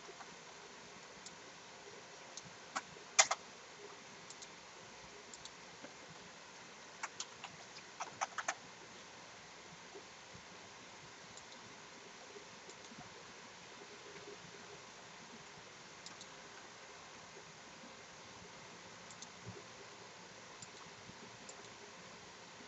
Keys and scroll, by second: 0.0 ctrl+t, 3.2 Return.